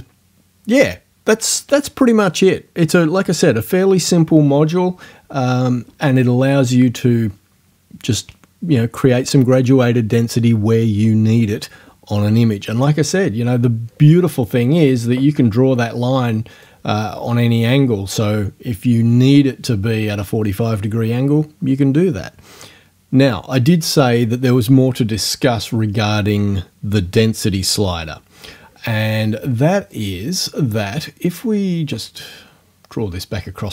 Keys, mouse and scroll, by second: 16.7-17.8 drag, 30.0-32.1 right drag.